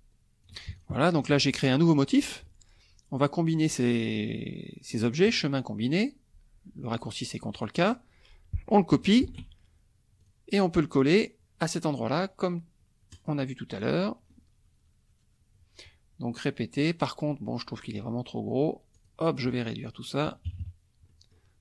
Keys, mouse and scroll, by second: 0.7 ctrl+shift+click, 1.1 ctrl+shift+click, 5.3 click, 7.5 click, 9.2 ctrl+c, 10.2 click, 13.1 click, 18.9 click, 20.4 KP_Subtract, 21.0 click.